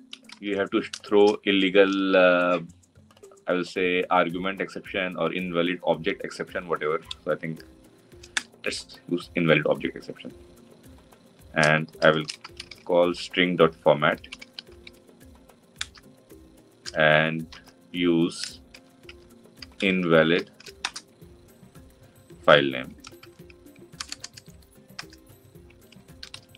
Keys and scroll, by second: 8.3 Return, 15.6 Return.